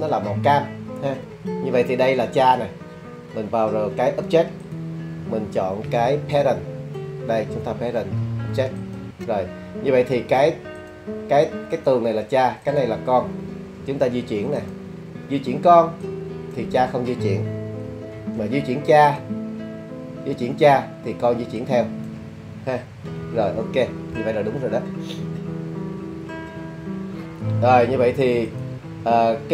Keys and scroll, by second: 18.1 super+z, 23.5 super+z.